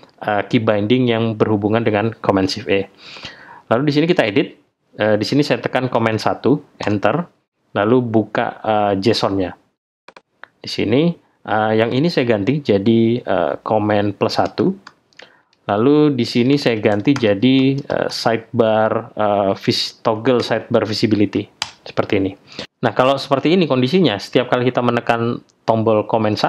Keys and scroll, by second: 5.9 super+1, 6.8 super+Return.